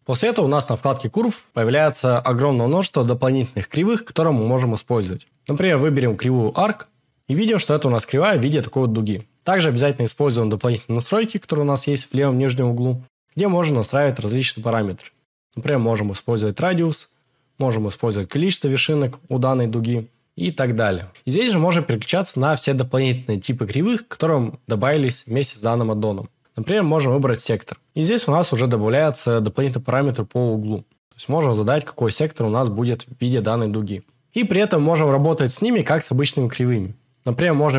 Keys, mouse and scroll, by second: 7.3 right click, 14.7-16.7 drag, 17.2-19.2 drag, 21.1 click, 30.1-32.9 drag, 33.9 click, 34.2 n.